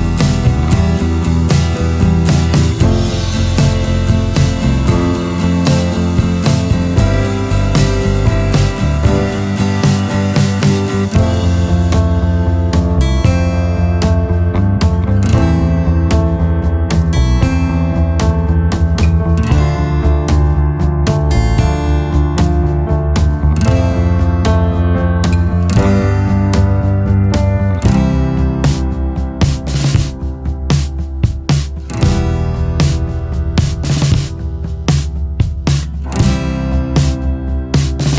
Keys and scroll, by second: 11.1 ctrl+z, 12.0 ctrl+alt+space, 12.3 ctrl+alt+space, 12.4 ctrl+alt+space, 16.5 Right, 21.2-21.6 scroll, 32.3 scroll, 36.0 Delete.